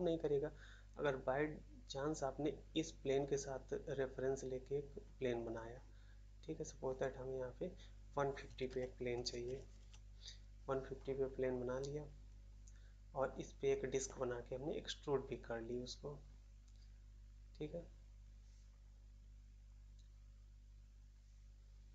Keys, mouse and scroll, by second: 9.7 Return, 9.7 typing.